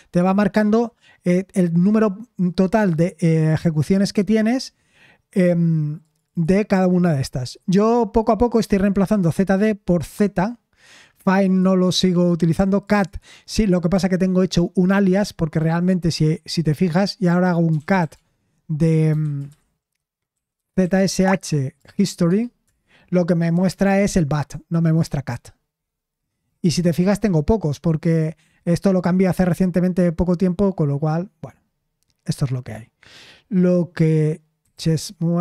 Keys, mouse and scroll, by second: 17.4-22.4 typing, 22.6 Return, 34.3-35.4 typing.